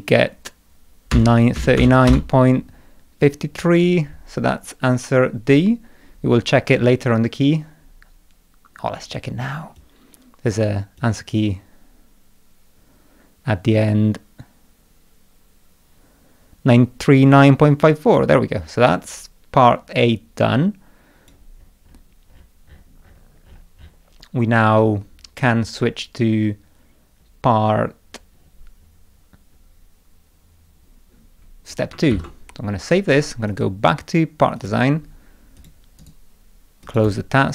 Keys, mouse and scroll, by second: 1.1 Return, 1.6 Return, 9.8 click, 11.0-21.3 drag, 21.6-22.1 scroll down 2, 22.3 middle click, 22.7-24.1 scroll up 4, 24.7-25.1 scroll down 1, 27.2-28.0 scroll down 3, 28.3-30.1 scroll down 5, 30.3 middle click, 31.7 click, 32.1 ctrl+s, 33.5 click, 34.6 click, 35.6 click, 36.0 right click, 36.9 click, 37.1 right click.